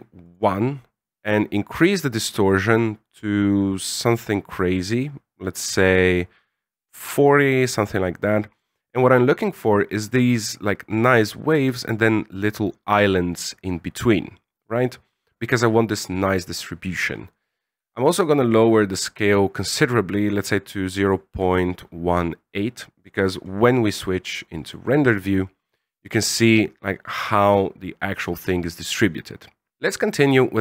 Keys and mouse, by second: 0.2 click, 1.1-8.6 drag, 17.8-21.2 shift+drag.